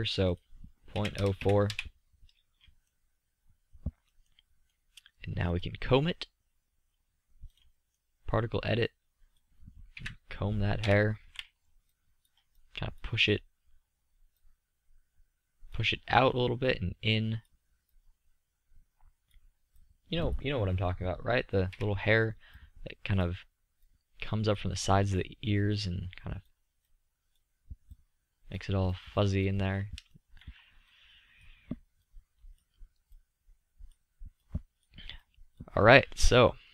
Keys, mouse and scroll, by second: 1.7-3.8 middle drag, 3.9 middle click, 4.2 middle click, 4.7 middle click, 10.2-11.4 drag, 11.4 KP_3, 12.2 KP_5, 12.7 z, 12.9-14.7 middle drag, 23.1 KP_1, 28.7-31.6 drag, 31.6-34.1 middle drag.